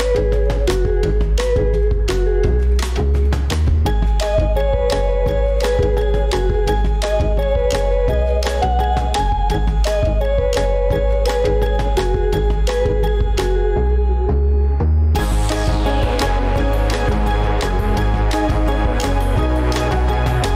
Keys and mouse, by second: 1.6 ctrl+b, 12.2-17.2 drag, 18.3 click.